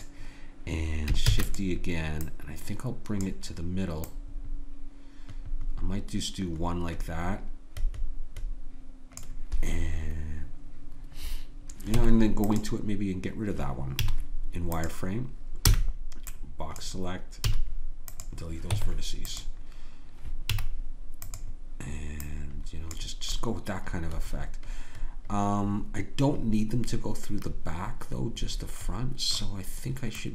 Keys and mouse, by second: 1.3 shift+d, 2.2-4.6 drag, 4.8-6.0 drag, 12.0 Tab, 14.0 z, 15.7 b, 17.4 x, 18.7 Tab, 20.5 z, 22.2-25.4 drag, 30.2-30.3 drag.